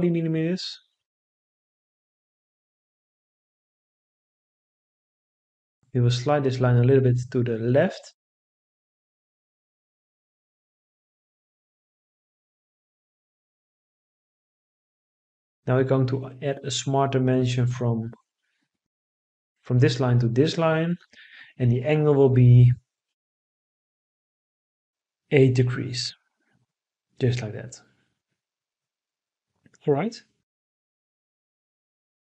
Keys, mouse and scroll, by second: 0.6 Return, 2.2 Escape, 4.8 Escape, 25.6 8, 26.7 Return.